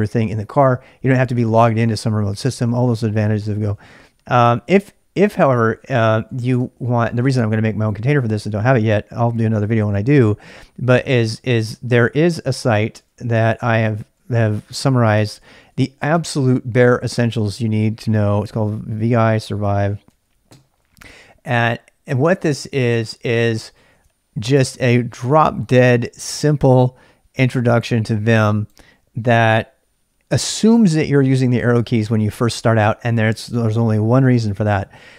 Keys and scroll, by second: 3.5-7.0 typing, 12.5-17.6 typing, 18.9-23.4 typing, 24.0 super+k.